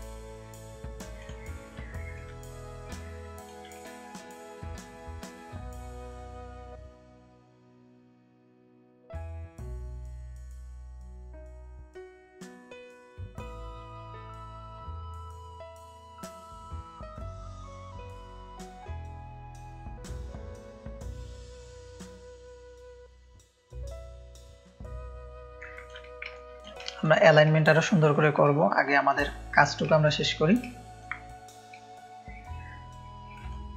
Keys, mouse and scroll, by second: 2.1-3.4 shift+drag, 4.2 ctrl+space, 4.2-6.8 ctrl+drag, 7.5 space, 7.7 click, 8.4 click, 10.3-11.2 drag, 13.2-14.0 drag, 16.9 click, 17.8-18.9 drag, 19.7 shift+click, 22.2-22.7 drag, 23.0-24.2 drag, 24.5-25.8 drag, 25.5 ctrl+space, 26.3 ctrl+click, 26.8 click, 26.8 space, 27.5 ctrl+space, 27.5 ctrl+click, 28.1 click, 28.4 click, 28.4 space, 29.2 ctrl+space, 29.2 ctrl+click, 29.9 click, 29.9 space, 30.3 click, 30.7 ctrl+space, 30.7 ctrl+click, 33.4 ctrl+space, 33.5 ctrl+click.